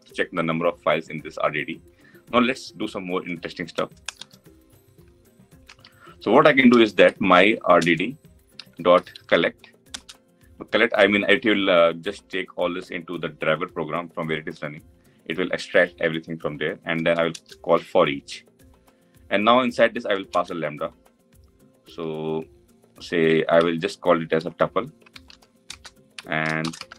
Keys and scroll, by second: 7.5 Return, 17.1 Return.